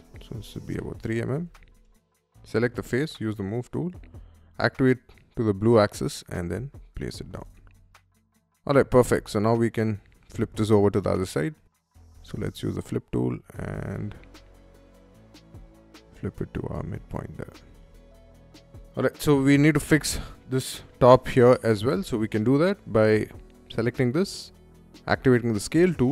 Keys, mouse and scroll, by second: 0.0 3, 0.5 Return, 1.0 space, 1.3 click, 1.9 m, 2.3 click, 3.0 Up, 3.7-4.9 middle drag, 6.1 click, 6.5 middle click, 7.0 space, 7.4 Escape, 7.5 Escape, 7.7-8.0 scroll down 1, 8.4 middle click, 8.9 click, 10.3 middle click, 11.3 shift+s, 12.0 f, 12.3 click, 14.2-16.5 ctrl+drag, 16.9 middle click, 17.4 space, 17.6 click, 18.0 middle click, 18.5 middle click, 19.0 scroll up 1, 19.7 middle click, 21.5 middle click, 21.8-22.8 scroll down 1, 22.8 click, 23.5 middle click, 24.1 middle click, 24.7 middle click, 25.0 s.